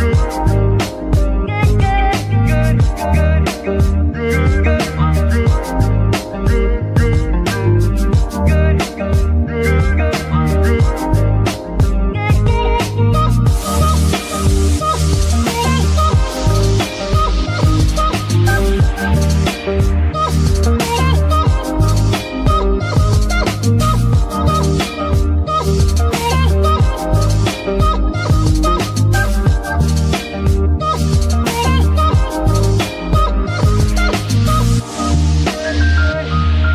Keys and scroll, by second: 1.9 alt+shift+g, 2.1 r, 2.5 alt+shift+g, 4.3 Escape, 9.4 shift+z, 14.0 ctrl+shift+z, 14.6 shift+z, 17.6 shift+z, 27.4 r, 28.4 Escape, 28.9 g, 29.4 Escape, 30.1 r, 30.8 Escape, 31.7 r, 32.6 Escape, 34.1 g, 35.4 Escape.